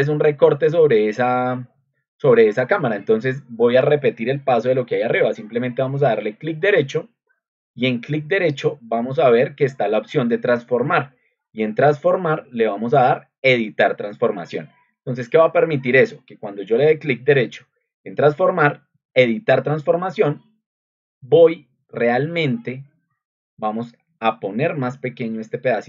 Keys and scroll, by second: 8.9 ctrl+2, 15.3 Escape.